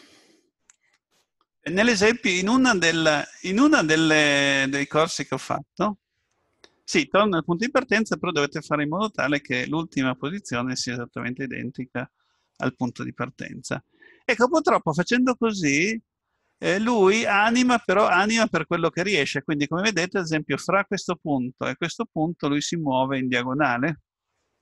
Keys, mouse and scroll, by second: 0.0 middle click, 11.2 click.